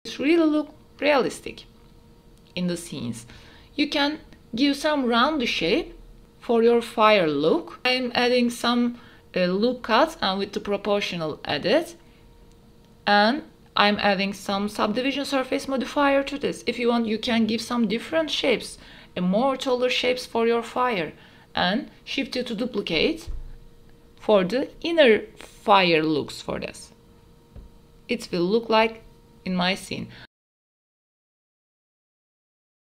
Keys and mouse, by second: 0.4-0.8 middle drag, 0.9 space, 1.8 click, 3.2 space, 3.6 s, 4.6 click, 5.1 Tab, 5.9 ctrl+r, 9.0 click, 9.1 middle click, 9.9-17.5 typing, 10.3 click, 11.3 click, 12.0 click, 12.5 click, 12.8 click, 13.3 click, 13.9 click, 14.1 click, 15.1 click, 15.7 click, 16.1 click, 16.7 click, 16.9 click, 17.4 click, 17.7 click, 17.8 Tab, 18.2 click, 18.5 click, 18.8-19.3 drag, 19.7-20.9 drag, 21.4 middle click, 22.5 space, 22.7 middle click, 23.6 space, 24.3 middle click, 24.4 space, 24.8 middle click, 26.7 space, 27.5 space, 29.1 drag, 30.2 KP_Divide, 30.6 a, 30.7 middle click, 30.9 shift+middle click, 31.2 KP_0, 31.5 space.